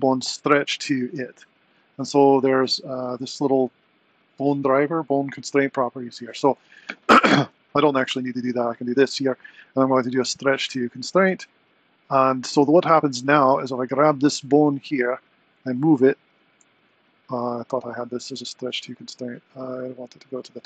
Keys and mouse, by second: 2.9 click, 7.8 ctrl+shift+c, 13.3 click, 14.3 click, 15.0 r, 16.8 click, 20.1-20.6 drag.